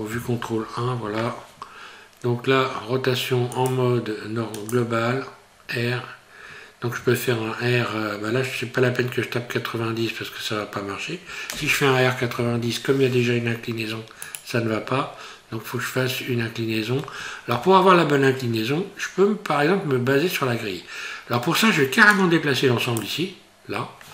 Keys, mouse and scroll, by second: 0.1 KP_1, 3.5 click, 11.5 r, 14.9-15.5 scroll up 1, 15.5-18.6 scroll up 2, 22.1 click.